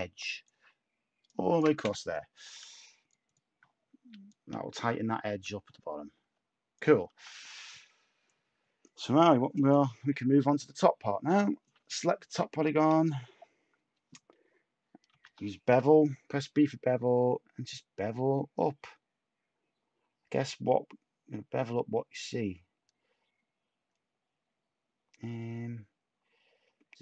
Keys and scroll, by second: 2.4 Tab, 5.2 a, 6.2 Tab, 12.9 a, 15.1 b.